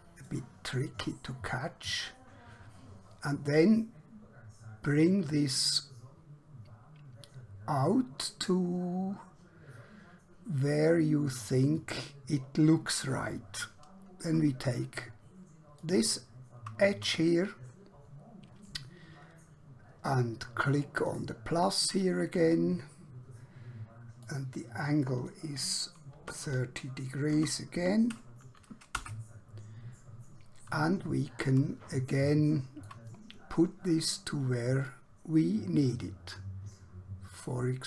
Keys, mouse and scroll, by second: 15.7 click, 21.0 click, 24.3 click, 26.1-27.7 typing, 29.1 Return, 31.3 scroll down 1, 32.2 shift+middle click, 34.8 click.